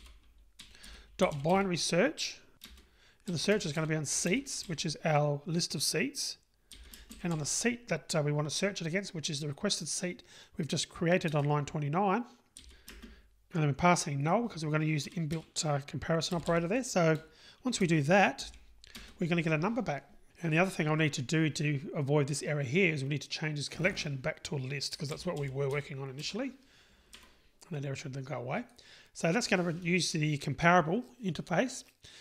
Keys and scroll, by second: 2.7 Return, 11.3 Return, 27.2 Escape.